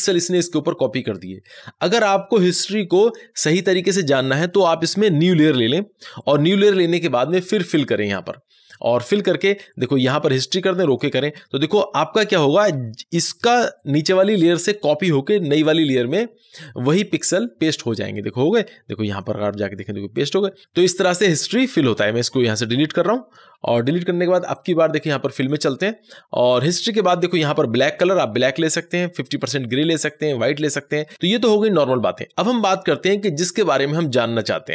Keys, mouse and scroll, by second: 5.4 click, 9.0 click, 19.0 click, 21.6-24.4 drag.